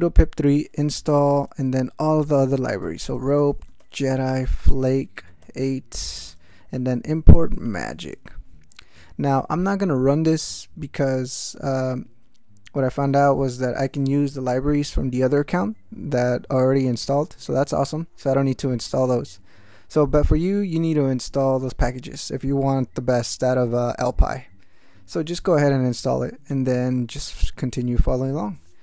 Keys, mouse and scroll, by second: 0.3-1.5 typing, 2.6-8.4 typing, 8.8 ctrl+a, 26.5 ctrl+k, 27.3 ctrl+d.